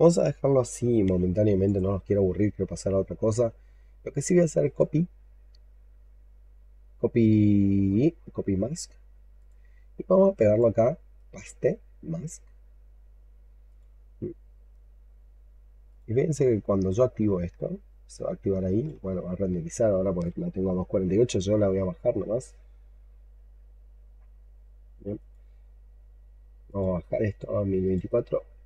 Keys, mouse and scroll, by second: 4.5 right click, 11.0 right click, 18.0 alt+click, 19.1-22.2 scroll up 3.